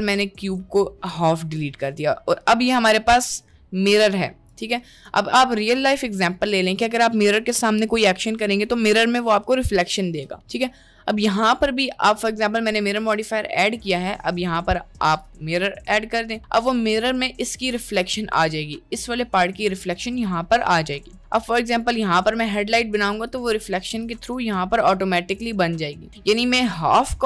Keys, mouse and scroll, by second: 2.3-4.2 drag, 12.2-14.4 drag, 15.8-18.1 drag, 21.5-22.5 drag, 23.3 click, 24.1 click, 24.9 click, 27.0-27.2 drag.